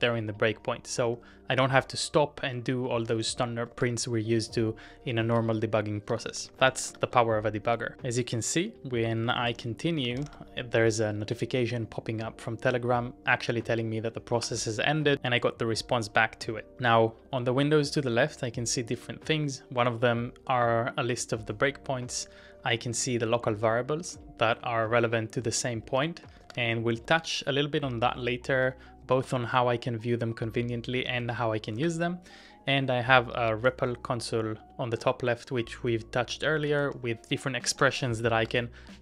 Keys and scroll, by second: 0.3 typing, 1.5-1.9 typing, 3.0-4.0 typing, 5.2-11.2 typing, 14.2-15.0 typing, 25.3 Tab, 25.5-29.0 typing, 29.2 Return, 30.7-34.6 typing, 31.8 ctrl+w, 35.8-38.5 typing, 37.7 ctrl+w, 38.4 ctrl+w.